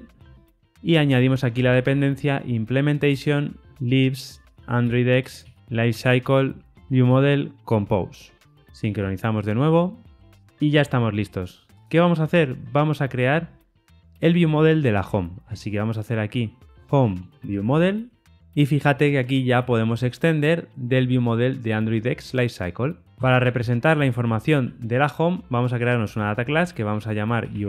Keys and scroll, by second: 3.1 Return, 5.2 Return, 7.6 Return, 8.9 shift+super+o, 15.6 super+n, 20.7 Return, 26.0 Return.